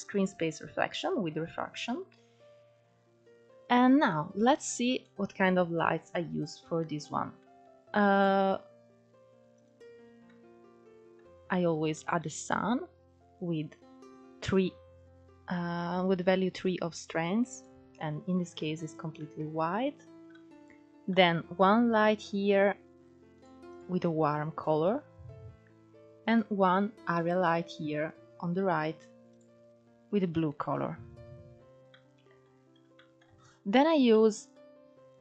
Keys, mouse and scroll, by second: 3.9-4.3 scroll down 4, 4.3-6.5 middle drag, 6.5-6.8 scroll down 4, 6.8-7.3 middle drag, 7.3 scroll up 1, 7.6-8.4 shift+middle drag, 8.4 click, 10.4-11.5 middle drag, 11.5 scroll up 3, 11.8-12.1 scroll down 2, 12.1-19.9 middle drag, 19.9 click, 20.5-21.0 middle drag, 21.0 scroll down 2, 21.3-22.3 middle drag, 22.3 click, 25.7 click, 26.5 click, 31.3 click, 32.0-32.6 middle drag, 32.6-33.1 scroll up 2, 33.1 shift+middle drag, 33.4-34.1 scroll up 4, 34.1 scroll down 1, 34.3-35.2 middle drag.